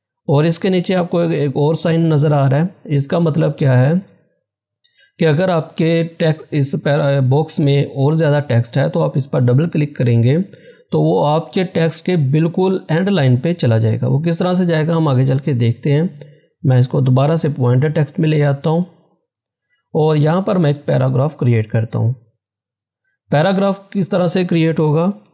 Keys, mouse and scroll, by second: 16.7 click, 16.7 click, 21.6 click, 22.5-23.0 scroll down 1.